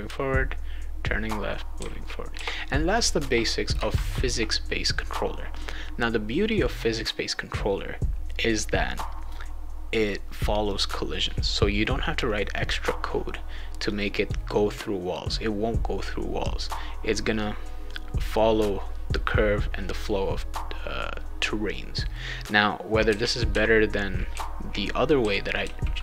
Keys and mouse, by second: 0.1 a, 1.7 w, 2.3 s, 10.6 click, 12.5 click, 14.4-16.6 right drag, 22.1-26.0 right drag, 22.8-26.0 typing.